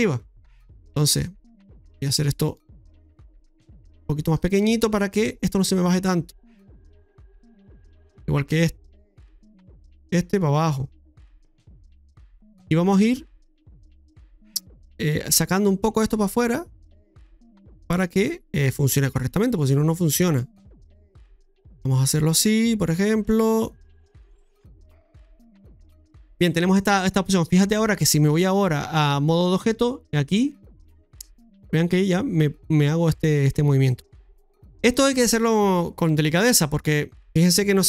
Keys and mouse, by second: 0.5-1.5 typing, 1.0-2.6 right drag, 2.7-6.5 right drag, 7.2-8.5 right drag, 9.0 middle click, 9.7-10.4 typing, 9.9-12.1 right drag, 11.9-12.6 typing, 12.3 middle click, 14.0-20.8 typing, 14.2 right click, 15.7 right click, 16.8-18.0 right drag, 18.9-20.3 right drag, 20.6 middle click, 21.7-23.0 right drag, 23.3 middle click, 24.3 right click, 25.5 right click, 26.1 middle click, 26.8 middle click, 28.4 click, 30.4-37.8 drag.